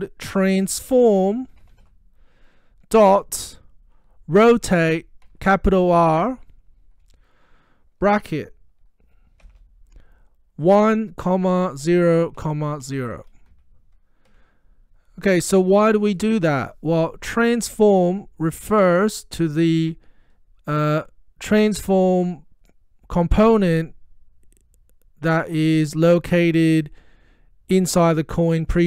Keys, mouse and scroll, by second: 0.1-6.7 typing, 9.5 shift+9, 10.7-14.3 typing, 13.6 Right, 26.4 click.